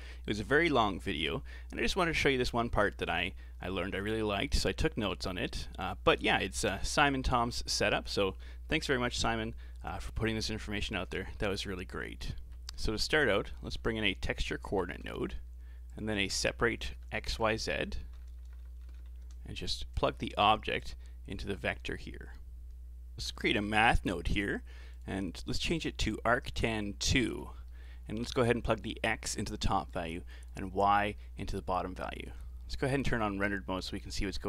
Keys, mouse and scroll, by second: 2.5-2.9 scroll up 3, 2.9 middle click, 3.2-3.8 scroll up 5, 3.8 a, 4.0 a, 4.4-4.8 scroll down 4, 4.8-5.6 middle drag, 5.6-6.2 scroll down 3, 12.3 middle click, 12.8 shift+a, 16.2 shift+a, 18.6 Down, 18.7 Down, 19.0 Down, 20.8 click, 21.8-23.0 scroll up 4, 23.1 shift+a, 25.5-27.1 drag, 27.1-27.7 scroll up 9, 27.7 middle click, 28.5 click, 29.9-30.8 drag, 30.8-31.1 scroll down 4, 31.1-32.1 middle drag, 32.1 ctrl+shift+click, 32.7 z, 34.3 Tab.